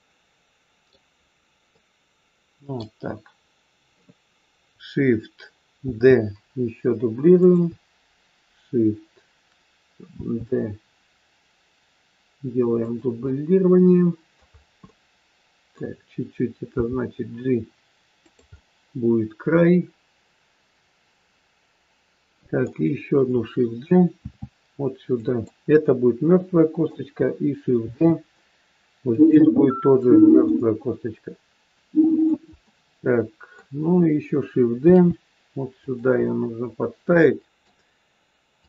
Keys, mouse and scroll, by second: 1.6 middle click, 5.9 shift+d, 10.1 shift+d, 13.3 middle click, 14.5-14.9 scroll down 2, 14.9 middle click, 16.7 g, 18.5 middle click, 24.2 shift+d, 25.7 middle click, 27.7 shift+d, 30.4 middle click, 32.6 middle click, 34.9 shift+d, 36.1 middle click, 38.5 click.